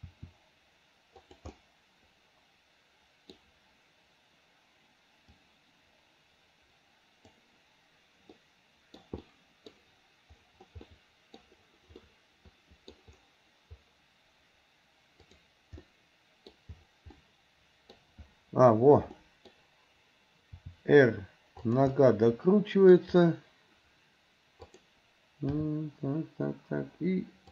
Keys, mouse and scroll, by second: 0.1 r, 1.6-3.4 middle drag, 5.5-7.5 drag, 12.1 middle click, 15.3 click, 17.2 middle click, 19.2 middle click, 20.6 r, 22.0-23.0 middle drag, 24.6 click, 25.6 g.